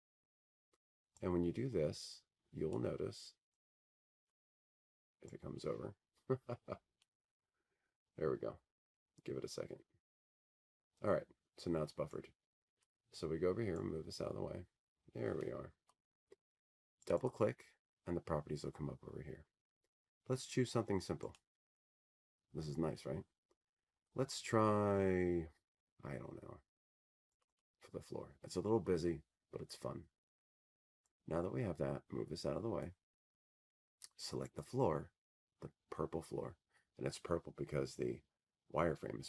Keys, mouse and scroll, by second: 1.7 click, 4.7 click, 6.4 click, 14.9 click, 17.8 click, 19.1 click, 19.4 click, 32.4 click, 33.1 click, 33.2 click, 38.4 click.